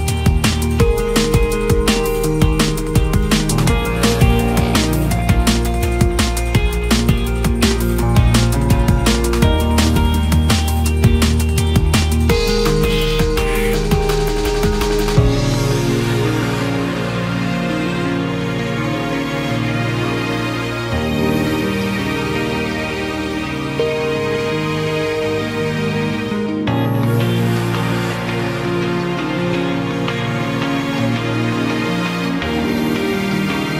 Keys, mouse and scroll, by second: 0.1 ctrl+r, 2.3-3.0 scroll down 3, 2.5 Tab, 3.0-3.8 middle drag, 3.8 ctrl+2, 5.7-6.7 drag, 6.7 KP_Divide, 7.3 KP_1, 8.0 Tab, 8.4-9.3 middle drag, 9.3 Tab, 10.1 click, 10.3-11.3 middle drag, 11.3-11.6 scroll up 2, 12.0 click, 12.7 click, 13.1-13.4 scroll down 6, 13.4-14.9 middle drag, 14.9 KP_1, 15.5-16.1 scroll up 1, 16.1 click, 16.4-16.8 scroll down 2, 16.8 click, 16.9-17.7 scroll up 1, 17.7 shift+d, 19.1 KP_Divide, 19.6-20.3 scroll up 1, 20.3 Tab, 21.7 click, 22.2 scroll up 1, 22.4-23.2 scroll down 2, 23.2 a, 26.0-28.0 drag, 29.0-30.5 scroll up 1, 30.5 click, 31.7 a, 32.4 click, 33.1 a.